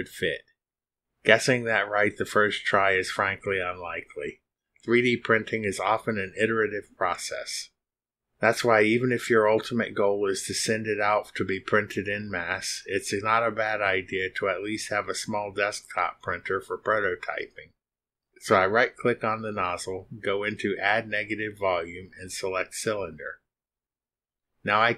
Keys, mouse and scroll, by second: 0.0-0.9 scroll up 4, 1.2-2.4 scroll up 6, 2.6-4.1 scroll up 8, 5.5 scroll up 2, 6.1-6.5 scroll up 2, 6.7 scroll up 2, 7.6-7.9 scroll up 2, 8.6 scroll up 2, 9.1 scroll up 2, 18.0 click, 18.4-18.9 scroll down 6, 19.0 click, 20.0 click, 23.0 click.